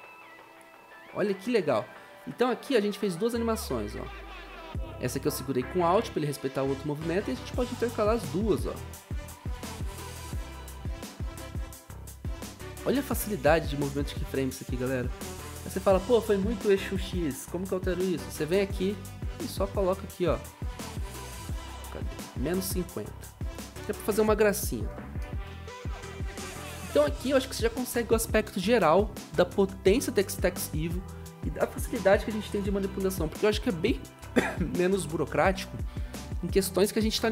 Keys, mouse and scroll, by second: 9.9 click, 10.3-12.9 scroll up 1, 13.0 0, 16.1 0, 24.3-25.3 typing.